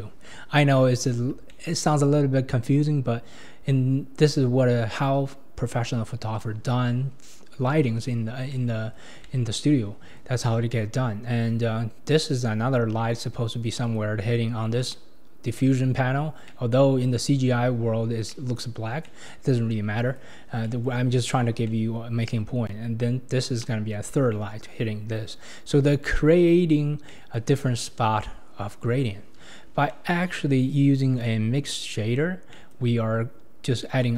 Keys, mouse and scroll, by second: 2.4-3.1 scroll up 1, 8.5-20.5 middle drag, 20.5 scroll up 1, 20.7-25.2 middle drag, 25.2-26.1 scroll down 2, 26.1-29.4 middle drag, 29.4-29.9 scroll down 8, 29.9-30.3 middle drag, 30.3-31.2 scroll up 5, 31.2 click, 32.2-32.5 scroll down 4, 32.5-34.1 middle drag.